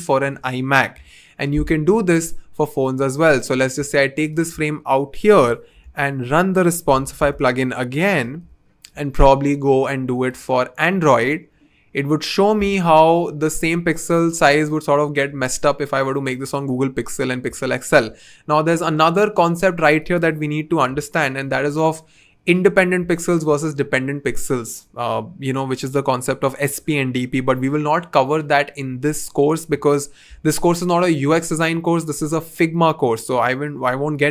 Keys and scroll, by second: 0.9 BackSpace, 5.8 super+/, 6.5-8.9 typing, 20.9 BackSpace.